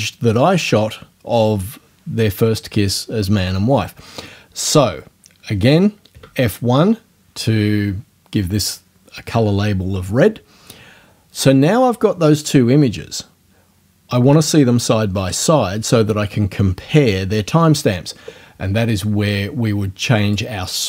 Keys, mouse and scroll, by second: 6.1 F1, 20.2 click.